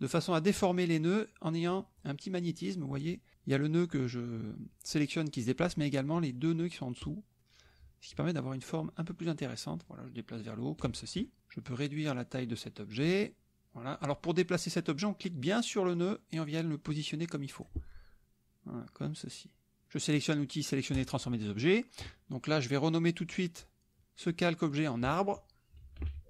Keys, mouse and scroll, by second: 11.6-13.1 drag, 15.9-17.8 drag, 19.2 click, 20.9 click, 24.8 click, 25.8 a.